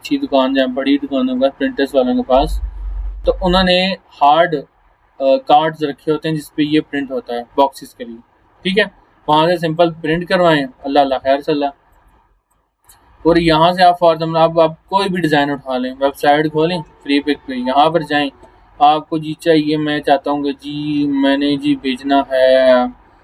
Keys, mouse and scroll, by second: 7.4 alt+scroll up 1, 7.9-8.6 alt+scroll down 1, 9.3-13.4 drag, 18.6 scroll down 1.